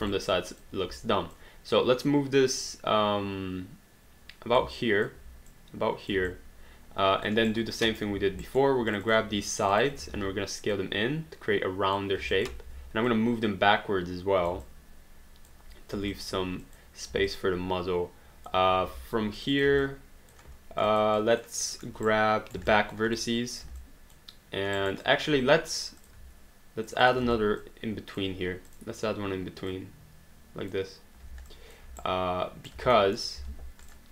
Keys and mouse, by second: 0.2 alt+click, 1.3 click, 4.6 alt+click, 6.3 alt+click, 7.5 right click, 8.1 q, 8.5 alt+right click, 8.9 click, 9.6 shift+click, 10.3 r, 10.7 click, 12.3 alt+click, 12.7 w, 13.1 click, 14.6 alt+click, 16.1 alt+click, 17.3 alt+click, 19.4 click, 19.9 alt+click, 21.0 alt+click, 21.7 alt+middle click, 22.1 right click, 22.7 alt+click, 24.0 alt+click, 24.8 alt+right click, 25.0 alt+click, 26.9 shift+click, 27.2 w, 27.6 click, 28.7 click, 31.6 alt+click, 32.0 right click, 33.0 alt+middle click, 33.4 alt+d, 33.8 click.